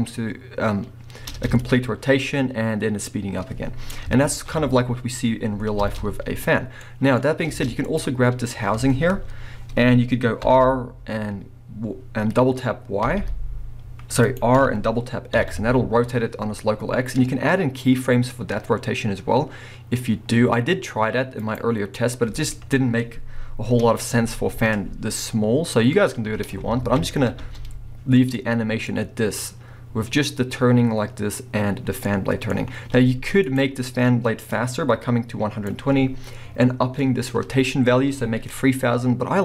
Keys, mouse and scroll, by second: 0.8-1.2 middle drag, 1.2 space, 1.6-6.9 drag, 4.3 alt+a, 5.8 space, 6.3 scroll up 1, 7.3 scroll down 1, 7.5 space, 7.9 click, 8.0-10.4 middle drag, 10.4 r, 14.4 right click, 14.6 r, 21.5 right click, 21.9 middle click, 23.7 KP_1, 25.8-28.3 drag, 26.8 alt+a, 27.4 space, 28.3 middle click, 29.0-33.5 middle drag, 32.9 space, 33.5 click, 34.7-39.4 drag.